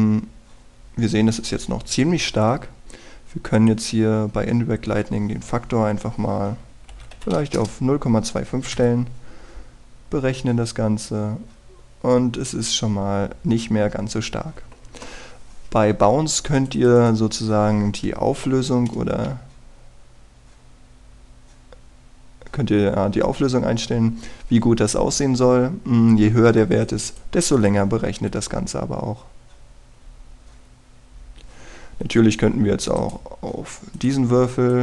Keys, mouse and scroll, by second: 0.5 scroll down 1, 0.8 scroll up 1, 2.7-4.3 scroll down 1, 4.6 click, 8.2 KP_2, 8.4 KP_5, 9.8 F12, 17.4 click, 19.5 F12, 27.7 click, 29.1 F12, 34.0 right click.